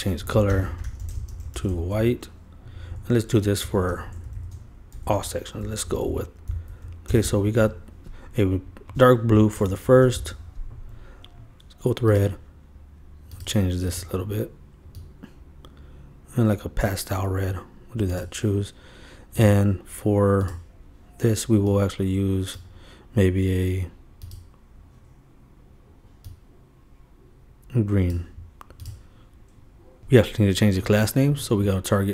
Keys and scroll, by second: 0.8-2.1 typing, 3.6 shift+Up, 4.2 shift+super+Up, 4.4 shift+super+Left, 4.9 shift+super+c, 5.1 super+Right, 7.2 super+Return, 9.6 super+v, 9.9 super+Return, 10.1 super+Return, 10.2 super+v.